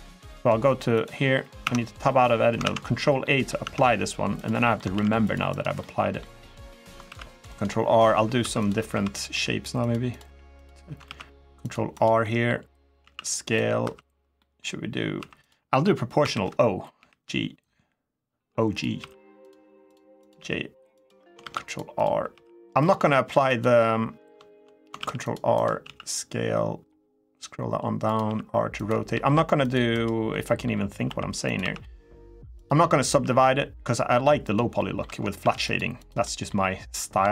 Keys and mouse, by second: 0.8 click, 1.4 Tab, 2.4 ctrl+a, 3.0 middle drag, 3.4 Tab, 4.4 middle click, 4.7 ctrl+r, 5.5 middle click, 6.2 middle click, 7.0 ctrl+r, 7.3 right click, 7.7 middle click, 8.2 2, 8.4 click, 8.7 1, 8.9 click, 9.1 g, 9.5 click, 10.0 g, 10.3 click, 10.8 ctrl+r, 11.7 click, 12.0 middle click, 12.8 s, 13.2 click, 13.6 2, 14.1 middle click, 14.9 1, 15.2 click, 16.0 o, 16.7 g, 18.5 click, 18.7 r, 19.2 click, 19.6 click, 20.0 click, 20.1 g, 20.7 click, 21.2 ctrl+r, 21.7 click, 22.1 r, 22.6 click, 22.7 g, 23.2 click, 24.7 ctrl+r, 25.3 click, 25.6 s, 27.8 click, 28.0 r, 28.5 click, 29.0 ctrl+r, 29.7 click, 30.1 middle click, 30.3 click, 30.8 r, 31.2 click, 31.4 s, 32.3 click, 32.8 r, 34.2 click, 34.5 middle click, 35.2 ctrl+r, 35.7 click, 36.0 middle click, 37.1 r.